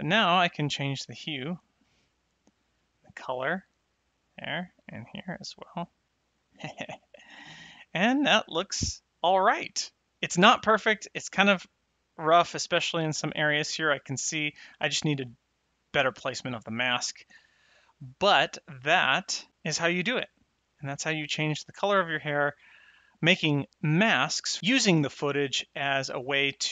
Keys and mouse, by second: 4.3 click, 6.9 click, 18.2 click, 20.9 middle click, 22.2 click.